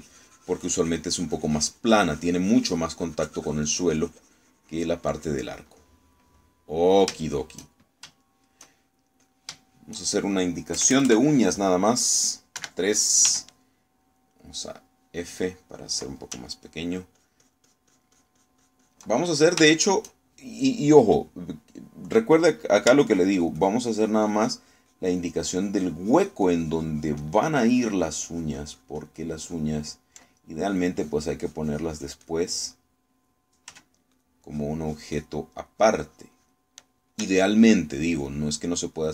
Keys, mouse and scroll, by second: 6.2 click, 6.8 middle click, 8.2-9.2 shift+middle drag, 10.3 click, 10.8 shift+middle click, 11.8 KP_Add, 12.8 click, 13.6 3, 14.3 f, 15.2 click, 16.0 middle click, 17.6-20.2 ctrl+drag, 20.6 ctrl+shift+middle click, 24.2-30.8 ctrl+drag, 31.7-33.5 ctrl+drag, 33.8 click, 34.8 f, 35.2 click, 36.8-37.8 drag.